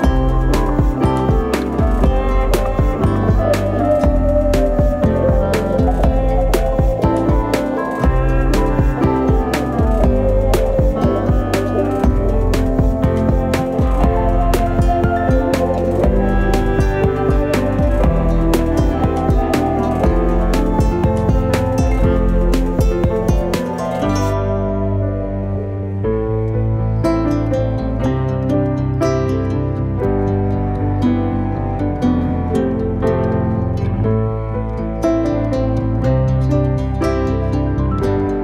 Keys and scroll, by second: 3.7 3, 4.8 g, 4.9 y, 6.3 shift+d, 6.4 y, 7.6-9.2 typing, 11.1-14.0 typing, 15.8 r, 16.0 z, 18.5 r, 18.6 z, 23.5 3, 24.0 shift+d, 24.1 z, 24.5 s, 26.2 r, 26.3 z, 28.8 3, 32.7 shift+s, 33.8 shift+a, 34.4 s, 35.8 7, 37.3 g, 37.5 y.